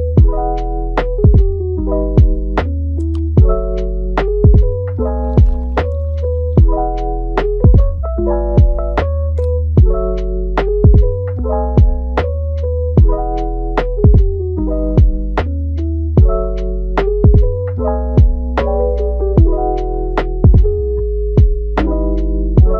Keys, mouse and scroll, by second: 0.3 click, 0.8 middle click, 1.2-1.7 scroll up 2, 1.7 shift+middle click, 2.4 click, 3.2-3.5 scroll down 2, 3.5-5.1 middle drag, 5.1 scroll down 3, 5.4 middle click, 6.0 KP_3, 6.3-7.8 scroll up 1, 7.8-9.2 drag, 9.2-10.5 middle drag, 10.5 KP_3, 11.1-20.5 drag, 20.5-21.3 scroll down 1, 21.3-22.7 drag.